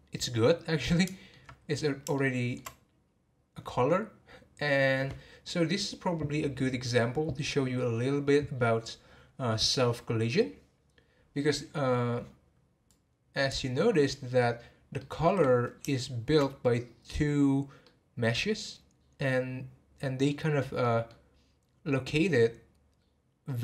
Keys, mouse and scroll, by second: 12.9-14.0 drag, 14.0-17.2 middle drag, 17.2-17.8 scroll up 2, 17.8-23.6 middle drag.